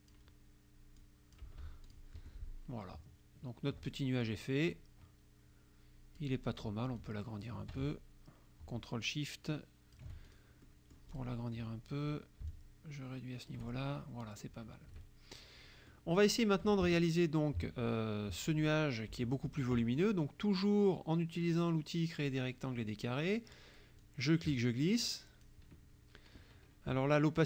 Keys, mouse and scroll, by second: 1.1 click, 1.9 click, 2.2 F1, 3.5 ctrl+scroll down 2, 4.0 ctrl+click, 4.7-6.4 ctrl+drag, 7.0-10.2 shift+drag, 10.3 ctrl+shift+click, 10.7 ctrl+shift+click, 10.7 ctrl+shift+middle click, 11.1 click, 12.6-13.8 shift+drag, 15.0 KP_Subtract, 16.0 click, 22.3 click, 24.1-25.7 drag.